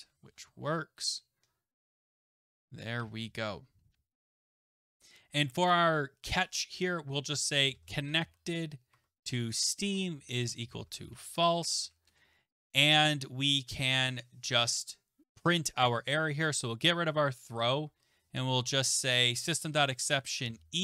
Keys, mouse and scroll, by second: 0.0-3.0 typing, 0.9-2.0 Right, 4.5-4.9 scroll, 5.4 click, 5.7 click, 7.3-8.9 typing, 10.1-12.1 typing, 13.9-17.0 typing, 15.2 ctrl+z, 15.2 click, 17.9 Tab, 20.1 click, 20.4 e.